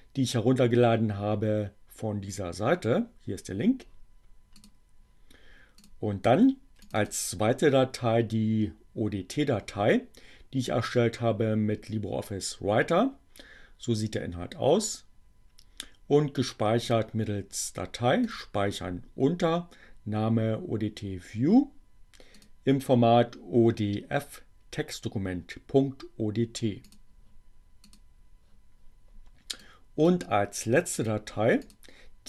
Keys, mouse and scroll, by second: 4.7 click, 5.8 click, 6.7 click, 16.9 click, 18.3 click, 22.3 click, 27.0 click, 27.9 click, 29.7 click, 30.9 click, 31.7 click.